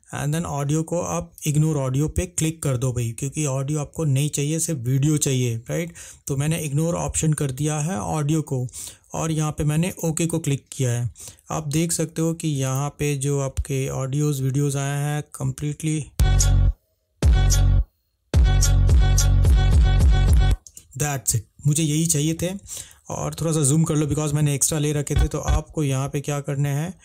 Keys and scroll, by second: 15.6 space, 20.8 space.